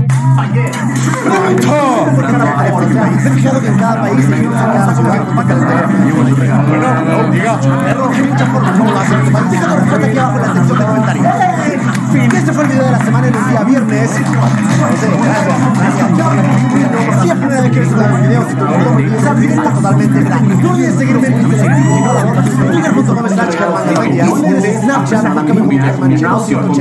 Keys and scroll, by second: 23.2 space.